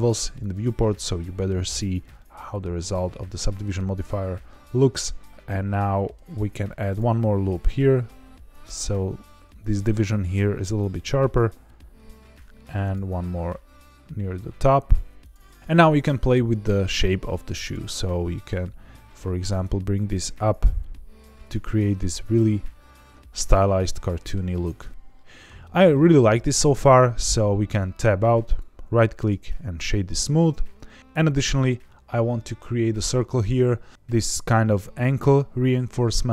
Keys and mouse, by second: 0.4 click, 2.1-3.6 middle drag, 6.2 ctrl+r, 9.5 click, 10.9 middle click, 12.2 ctrl+r, 15.2 click, 15.5 middle click, 17.5 click, 18.4 g, 18.6 z, 21.4 click, 21.7-24.8 middle drag, 25.9 middle click, 27.6 Tab, 28.5 right click, 36.1-36.3 middle drag.